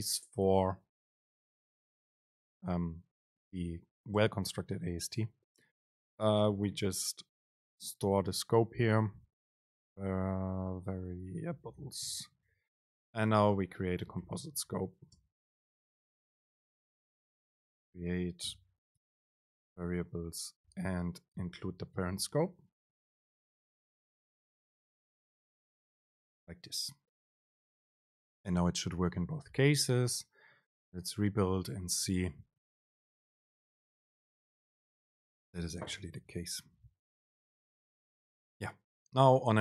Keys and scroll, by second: 4.3 alt+super+v, 13.1 Left, 13.7 ctrl+shift+super+Left, 15.3 super+space, 21.7 BackSpace, 24.7 BackSpace, 24.9 super+space, 26.1 Up, 36.8 BackSpace, 37.7 Up, 38.2 super+space.